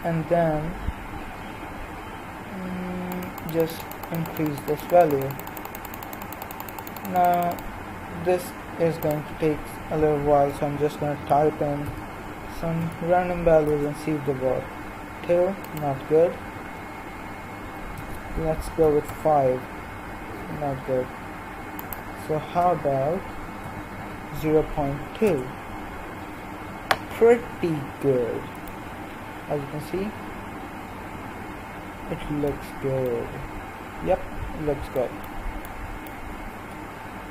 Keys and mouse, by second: 7.8-13.2 drag, 23.9 BackSpace, 29.1-30.7 middle drag, 32.4-33.6 middle drag, 35.4-37.3 middle drag.